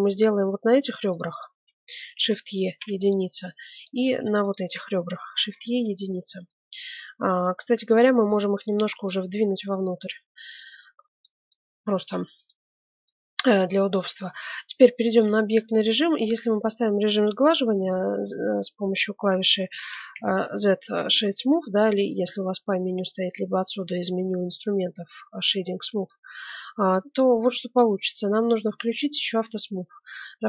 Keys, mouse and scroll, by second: 0.8-3.3 right drag, 2.1 shift+e, 3.7-6.3 right drag, 5.4 shift+e, 6.4-8.3 middle drag, 9.0-11.0 drag, 11.5-14.7 middle drag, 14.4 Tab, 14.6 Tab, 15.7 y, 16.2 y, 17.8 y, 19.7 ctrl+shift+2, 20.1 z, 22.1 middle click, 26.0-27.8 middle drag, 29.5-30.4 drag.